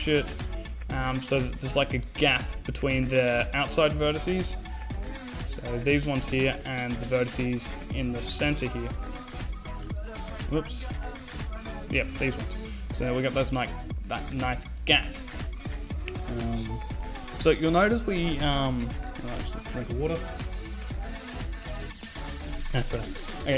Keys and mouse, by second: 3.3-5.2 drag, 3.5 a, 4.3 right click, 5.2 a, 6.7 a, 9.8 ctrl+z, 10.0-12.3 drag, 12.9 click, 13.7 KP_5, 14.1 z, 14.6 middle click, 15.4 o, 16.1 a.